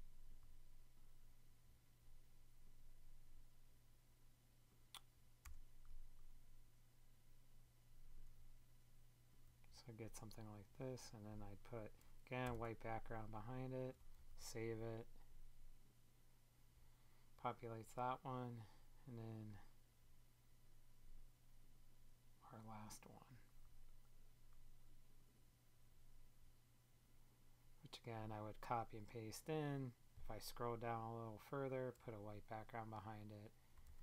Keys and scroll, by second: 5.3 Return, 12.3 super+BackSpace.